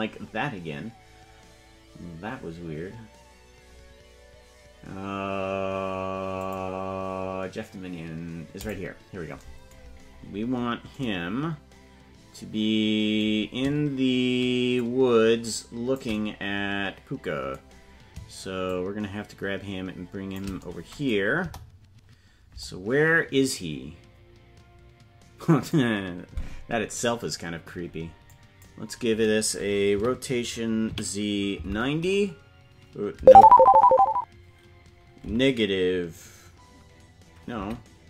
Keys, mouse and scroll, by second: 3.6-5.6 scroll up 1, 6.3 click, 6.3 scroll up 3, 8.5 click, 9.8-10.9 scroll down 19, 14.7-15.9 shift+drag, 18.6-20.4 shift+drag, 21.4 KP_0, 22.6 click, 23.3-25.7 drag, 28.2 click, 29.9 r.